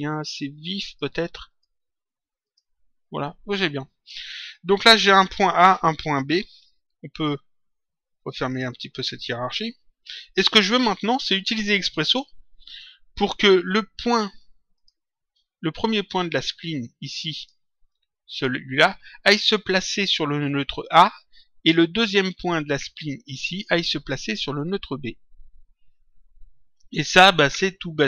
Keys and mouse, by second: 1.4 click, 8.1 click, 14.7 click, 17.3 click, 21.9 click, 23.0 click.